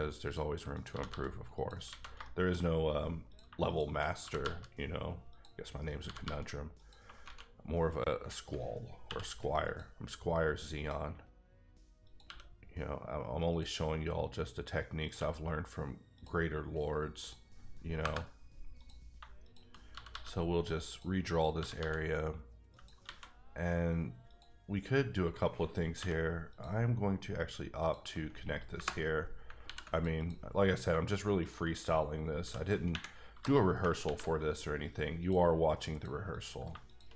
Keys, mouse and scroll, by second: 0.2 click, 0.7 click, 0.9 g, 1.1 g, 1.5 click, 1.9 alt+a, 2.2 shift+middle click, 2.6 scroll up 1, 3.3 click, 3.4 shift+click, 4.2 g, 4.4 g, 5.3 click, 5.9 click, 6.0 g, 6.2 g, 6.8 click, 7.3 alt+a, 9.0 k, 9.6 click, 10.7 click, 12.2 e, 13.5 click, 15.0 click, 15.1 e, 16.1 click, 17.2 click, 18.0 KP_Enter, 18.8 click, 19.1 shift+click, 19.9 g, 20.1 g, 20.8 click, 21.2 click, 21.5 g, 21.7 g, 22.7 click, 23.0 alt+a, 24.3 click, 25.9 k, 26.5 click, 27.8 click, 28.7 KP_Enter, 29.6 ctrl+r, 29.9 ctrl+click, 30.8 click, 31.4 shift+click, 32.3 k, 32.9-33.3 scroll, 33.7 j, 34.0 ctrl+r, 35.2 click, 35.8 click, 36.3 click, 36.9 shift+click.